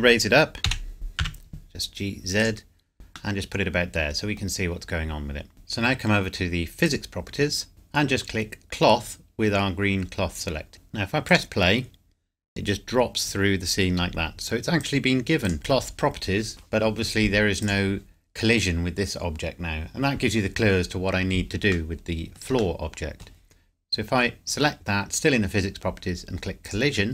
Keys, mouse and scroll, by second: 0.7 g, 1.2 z, 2.4 click, 3.3 middle click, 6.9 click, 10.7 click, 11.3 click, 12.8 scroll down 1, 14.8 click, 15.5 scroll up 1, 15.6-17.1 scroll down 1, 17.7 click, 18.2 scroll down 1, 21.7 scroll down 1, 22.5-23.7 scroll up 1, 26.6 click.